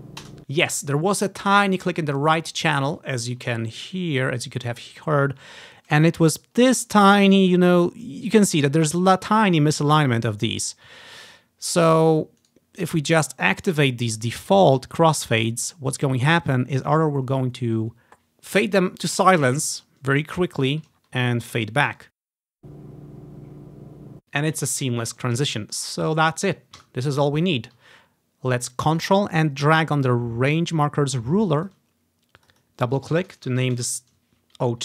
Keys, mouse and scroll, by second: 0.3 space, 3.2-4.8 ctrl+scroll up 5, 5.3 scroll up 1, 11.9-13.5 right drag, 13.0-16.1 drag, 15.1 scroll down 2, 15.5-15.9 scroll up 3, 21.0-21.6 scroll down 1, 21.6-23.6 ctrl+drag, 22.5 space, 24.1 space, 25.4-26.0 ctrl+scroll down 1, 26.2 click, 26.9 Delete, 29.5-31.8 ctrl+drag, 32.5 click, 32.7 click, 33.2 click, 33.5 0, 33.7 2, 33.9 Return.